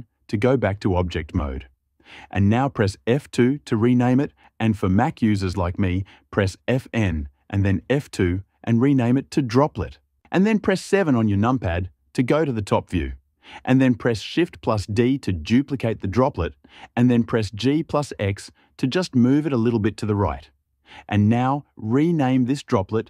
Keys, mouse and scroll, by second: 2.3 F2, 10.7 KP_7, 14.1 shift+d, 16.7 g, 17.4 x, 19.6 click.